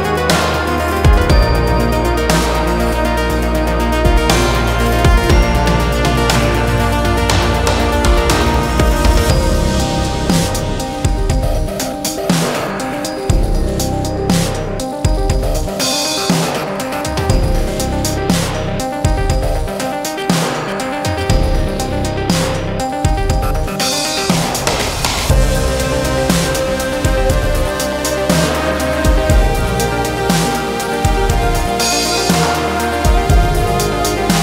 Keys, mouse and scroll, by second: 1.3 z, 21.2 click, 27.3 click.